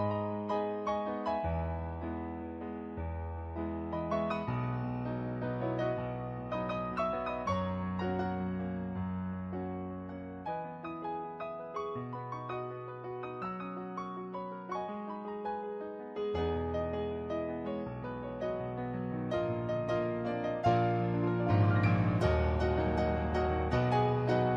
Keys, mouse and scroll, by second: 5.1 ctrl+z, 5.6 ctrl+z, 6.4 ctrl+z, 6.9 ctrl+z, 7.3 ctrl+z, 7.9 ctrl+z, 8.2 ctrl+z, 8.9 ctrl+z, 9.2 ctrl+z, 9.7 ctrl+z, 10.9 ctrl+z, 11.7 ctrl+z, 13.8 ctrl+z, 14.0 ctrl+z, 14.2 ctrl+z, 14.5 ctrl+z, 15.0 ctrl+z, 15.4 ctrl+z, 15.9 ctrl+z, 16.4 ctrl+z, 16.8 ctrl+z, 17.6 ctrl+z, 18.8 ctrl+z, 20.4 ctrl+z, 21.2 ctrl+z, 22.0 ctrl+z, 22.3 ctrl+z, 22.9 ctrl+z, 23.2 ctrl+z.